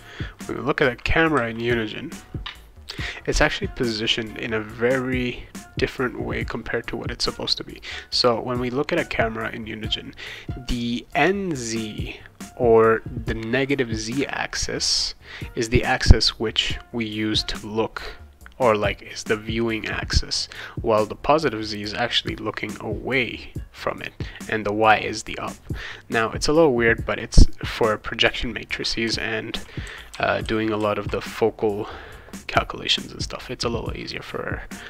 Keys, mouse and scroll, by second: 0.0-1.3 typing, 28.4-31.3 right drag, 29.0-30.8 typing.